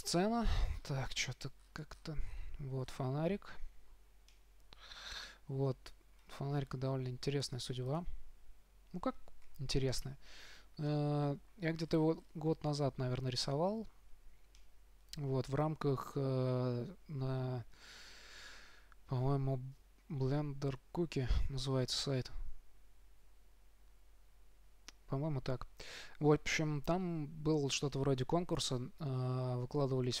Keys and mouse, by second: 0.1 KP_5, 3.2-5.2 middle drag, 6.8-8.5 middle drag, 8.5 right click, 12.1-16.9 middle drag.